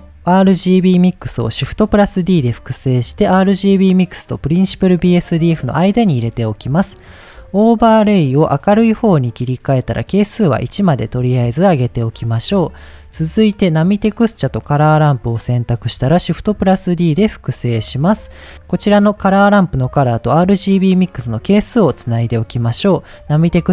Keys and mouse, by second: 1.9 shift+d, 5.4 click, 6.4 middle click, 7.1-9.0 drag, 10.1-10.8 drag, 13.8-14.1 drag, 15.0 middle click, 16.3 shift+d, 17.5 click, 18.2 middle click, 19.1-20.9 drag, 23.2 click.